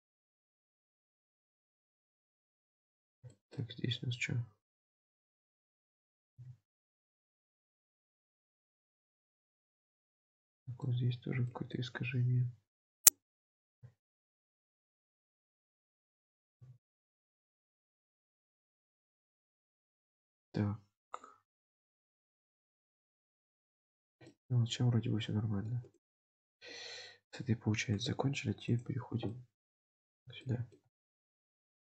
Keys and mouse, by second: 0.9 Tab, 1.4-3.0 middle drag, 3.0 Tab, 3.4 shift+middle click, 5.4 click, 6.2 g, 7.7 Tab, 8.4-9.7 middle drag, 10.2-10.8 middle drag, 11.0 Tab, 11.6 shift+middle click, 13.0 click, 14.2 shift+click, 15.0 alt+z, 16.6 g, 17.7 alt+z, 18.3 Tab, 18.9-23.3 middle drag, 24.2-25.8 middle drag, 28.1 drag, 28.8 click, 29.4-30.2 middle drag, 30.5 shift+click, 31.4 middle click.